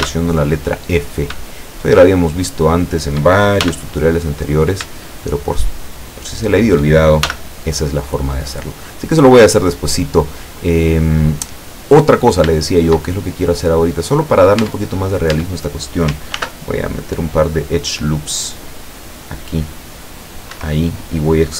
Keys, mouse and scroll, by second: 0.0 f, 1.1 shift+right click, 1.6 shift+right click, 2.3 shift+right click, 2.9 shift+right click, 3.7 shift+f, 4.5 right click, 5.3 shift+right click, 5.9 shift+right click, 6.5 shift+right click, 7.3 shift+f, 7.9-8.6 scroll down 4, 8.6-9.7 middle drag, 9.9-10.5 scroll up 2, 10.7-12.3 middle drag, 12.3 scroll up 2, 12.6-13.7 shift+middle drag, 13.9 right click, 14.6 Tab, 15.4 Tab, 16.4 ctrl+r, 17.9 scroll up 2, 19.1 click, 20.6 Escape, 20.9 scroll up 1.